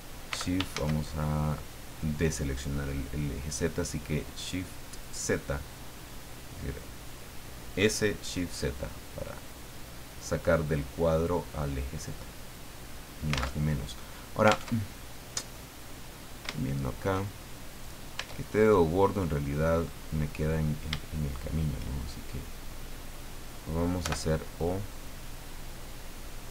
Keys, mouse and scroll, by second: 0.3 s, 0.5-1.3 shift+scroll up 2, 0.7 shift+z, 4.9 click, 6.0 click, 8.2 middle click, 9.5-11.4 drag, 12.1-13.6 drag, 13.6 alt+Tab, 14.7 alt+Tab, 15.1 alt+click, 15.8-16.1 scroll up 2, 16.4 scroll up 2, 16.5 shift+click, 17.7 right click, 18.1 Tab, 19.7 right click, 21.2 shift+right click, 24.0 o, 25.0-26.5 drag.